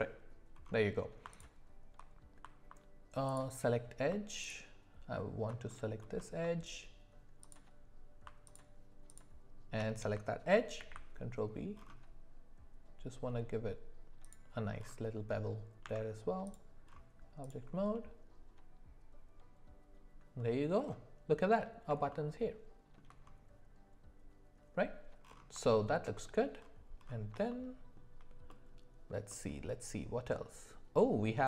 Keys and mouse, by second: 1.3 alt+click, 4.4 alt+click, 9.1 alt+shift+click, 10.8 ctrl+b, 15.8 Tab, 17.4 click, 17.9-20.4 middle drag, 22.1 shift+middle click, 25.7 shift+middle click.